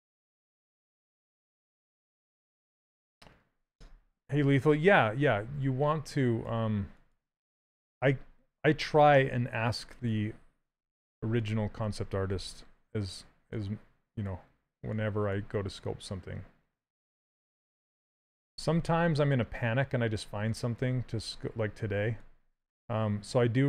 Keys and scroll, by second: 7.1 s, 9.5 s, 10.5 w, 12.0 q, 18.9 s.